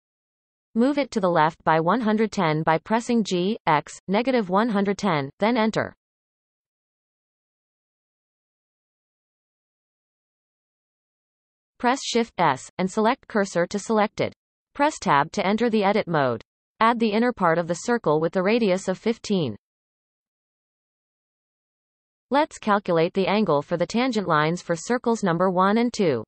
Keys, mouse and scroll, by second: 2.8 KP_7, 3.1-4.1 shift+middle drag, 4.1 g, 9.9-10.4 scroll up 1, 12.4 shift+s, 12.5-13.9 right drag, 13.9 Tab, 17.0 shift+a, 19.3-22.5 drag.